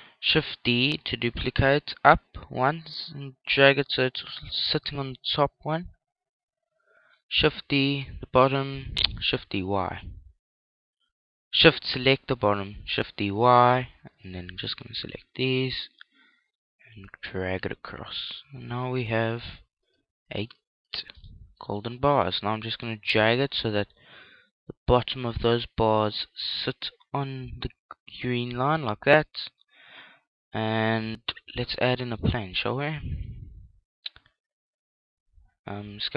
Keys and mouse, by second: 2.6 shift+d, 4.5 click, 6.2-10.4 middle drag, 7.5 click, 7.5 right click, 9.1 shift+d, 13.7 click, 14.2 right click, 15.4 shift+d, 15.6 right click, 19.2 click, 19.8-22.5 right drag, 21.5-23.4 middle drag, 23.4 click, 29.2-33.6 middle drag, 32.4 shift+a, 35.8 s.